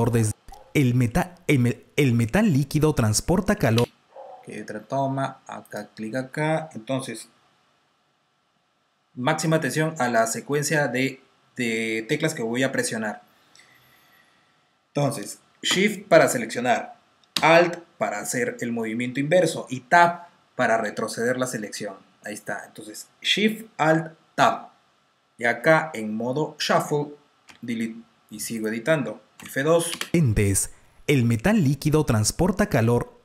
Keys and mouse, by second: 3.5 space, 5.5 click, 20.2 alt+shift+Tab, 27.4 Delete, 28.4 click.